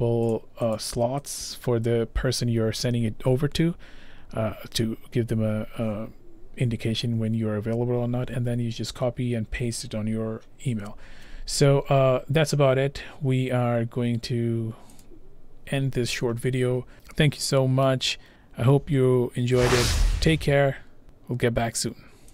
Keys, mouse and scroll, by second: 0.3 click, 0.8 click, 1.4 click, 15.0 click.